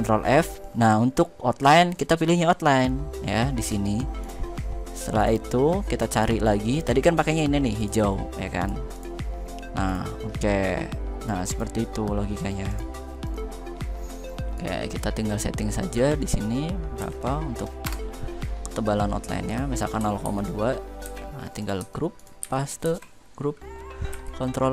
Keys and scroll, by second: 16.7 2, 17.5 Return, 19.9 ctrl+a.